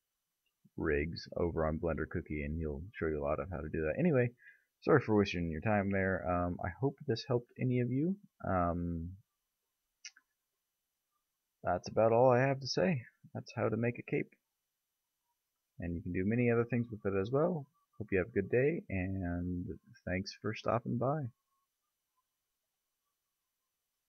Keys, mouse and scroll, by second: 0.0 ctrl+z, 0.5-1.3 middle drag, 1.4 middle click, 4.3-4.8 middle drag, 5.1 middle click, 5.5-8.5 middle drag, 9.9-11.6 middle drag, 11.6-14.3 drag, 13.5 a, 14.4 click, 14.9 click.